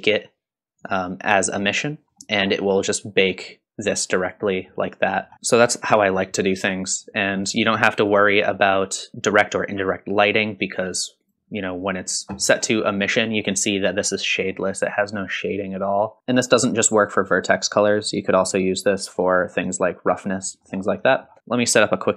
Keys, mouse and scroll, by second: 0.8 click, 2.2 middle click, 2.6-3.2 scroll up 2, 4.5 middle click, 5.3-5.7 scroll down 2, 5.4 middle click, 8.0-9.1 drag, 10.3-11.4 drag, 12.4 scroll up 1, 12.8-13.3 middle drag, 13.7 middle drag, 14.5-16.2 middle drag, 16.2 scroll down 2, 18.0 click, 20.4 middle click, 21.1 middle click, 21.6 shift+a, 21.8 click, 21.8 s, 22.0 ctrl+x, 22.0 click, 22.0 alt+right click, 22.1 click.